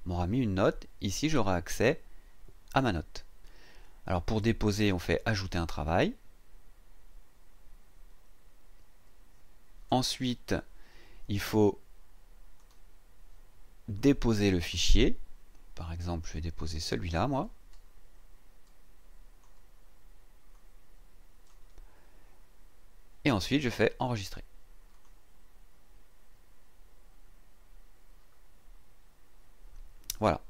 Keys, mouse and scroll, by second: 1.5-1.8 scroll down 2, 2.4-2.8 scroll down 2, 3.4 scroll down 2, 5.2 click, 12.6 click, 13.9-14.9 drag, 16.7-19.6 drag, 20.5 click, 24.9 click, 29.0-29.4 scroll down 2, 29.8-30.1 scroll down 2, 30.3-30.4 scroll down 2.